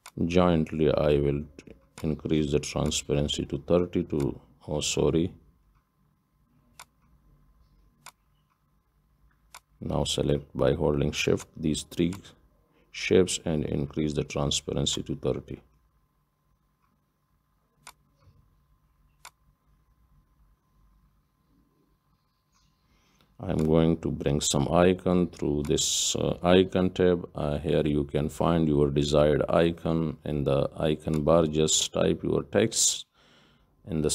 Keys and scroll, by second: 27.5 F9.